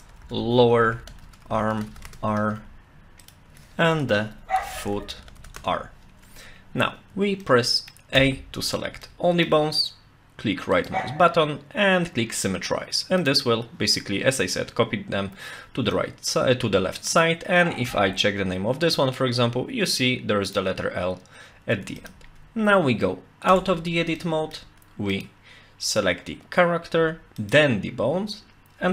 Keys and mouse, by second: 3.2 click, 3.5 F2, 4.9 o, 7.4 middle click, 8.2 a, 9.0 shift+middle click, 10.8-13.3 right drag, 14.4-16.0 middle drag, 17.1 click, 17.9 F2, 22.0 click, 23.5 Tab, 24.2-24.6 shift+middle drag, 25.2 click, 27.4 shift+click.